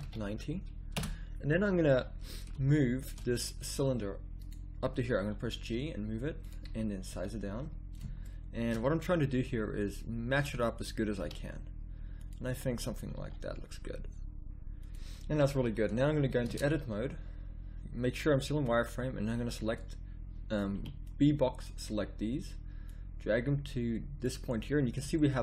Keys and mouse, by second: 2.7 middle click, 3.7 s, 5.1 g, 7.1 s, 9.4 g, 11.1 s, 13.1 g, 16.4 Tab, 16.9 a, 19.4 b, 20.7 b, 22.8-24.0 drag.